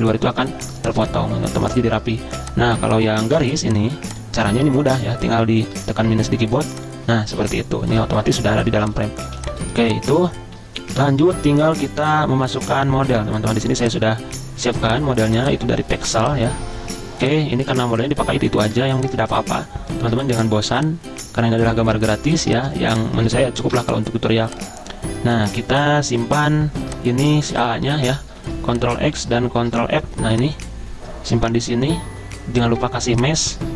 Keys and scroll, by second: 2.3 z, 3.5 v, 5.2 =, 5.8 -, 11.0 v, 22.5 z, 23.7 v, 28.5 ctrl+x, 29.7 ctrl+f.